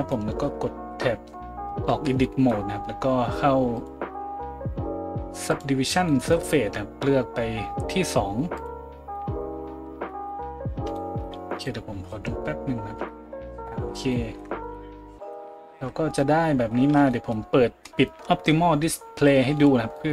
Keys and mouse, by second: 1.9 Tab, 9.7 a, 10.8-11.3 shift+middle drag, 11.3-13.0 drag, 13.0-13.6 shift+middle drag, 13.6-20.1 drag, 14.6 right click, 15.2 KP_Decimal, 15.7 Tab, 16.8 Tab.